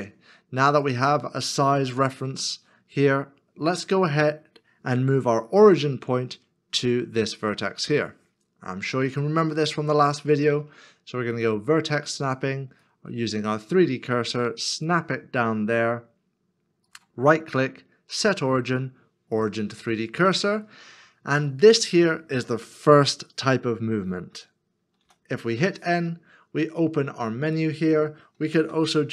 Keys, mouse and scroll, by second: 1.9 KP_Decimal, 2.7 KP_Decimal, 12.8 shift+right click, 16.9 right click, 28.6 n.